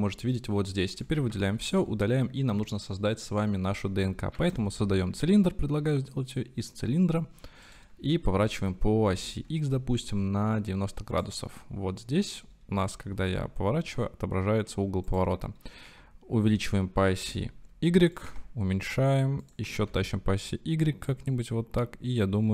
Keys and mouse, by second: 1.0 click, 1.3 a, 1.6 x, 4.4 shift+a, 8.5 r, 9.0 x, 11.1 ctrl+click, 13.3 r, 15.2-15.9 drag, 15.9 s, 16.4 x, 17.3 y, 18.3 s, 19.5 click, 19.7 s, 19.9 y.